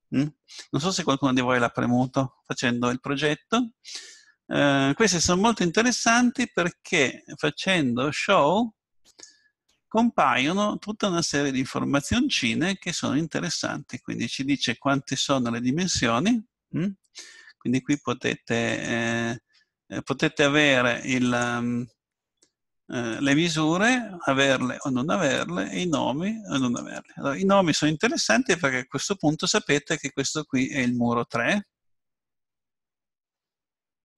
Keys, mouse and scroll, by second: 10.2 middle click, 11.0-12.2 middle drag, 17.8-20.5 drag, 21.3-23.1 drag, 27.7 click, 27.7 right click, 28.5-29.8 middle drag.